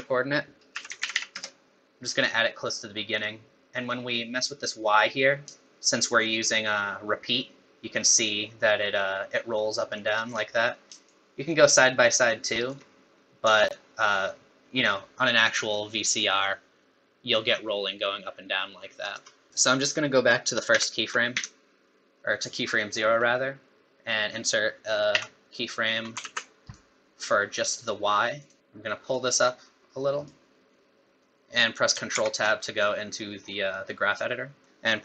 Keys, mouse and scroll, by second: 1.1 p, 4.7 click, 11.1 shift+click, 13.7 shift+click, 19.5 middle click, 20.7 shift+Left, 21.3 Left, 22.9-24.1 scroll up 8, 25.1 i, 26.2 ctrl+z, 26.6 right click, 27.8 right click, 29.1 click.